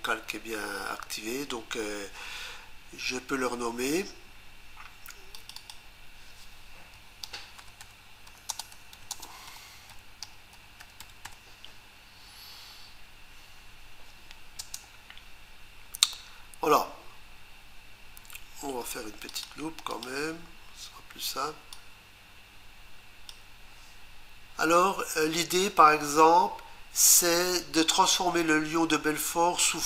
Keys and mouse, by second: 5.4 click, 5.6 click, 7.4-11.8 typing, 14.6 Return, 19.3 click, 19.9 click, 21.7 click.